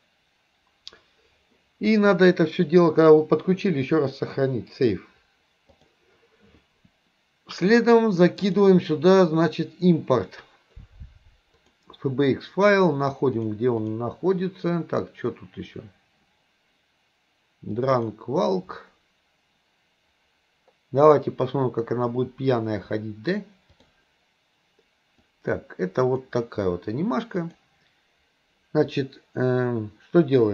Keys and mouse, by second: 0.0 click, 2.7-6.0 drag, 8.5-12.0 drag, 23.9 click, 25.4 click, 27.4 click.